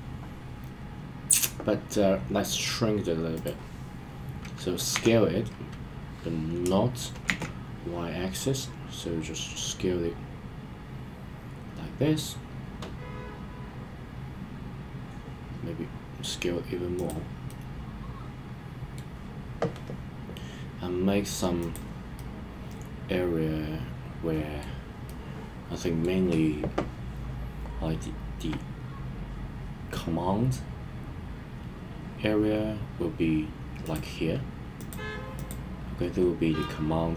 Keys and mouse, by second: 3.3 click, 4.9 s, 7.2 shift+z, 16.9 click, 17.4-19.0 middle drag, 22.1-24.6 middle drag, 25.0-26.0 middle drag, 36.6-37.1 middle drag.